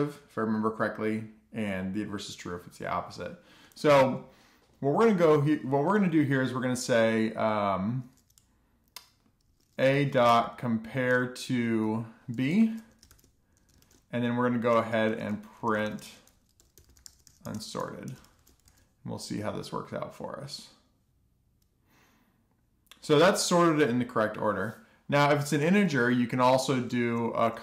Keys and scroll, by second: 11.7-13.4 typing, 13.6 Return, 14.7-15.7 typing, 14.8 Tab, 16.0 Return, 16.1 Return, 16.3 alt+shift+f, 17.2 Return, 17.6 Tab, 17.8-20.7 typing, 20.8 alt+shift+f, 21.1 super+s.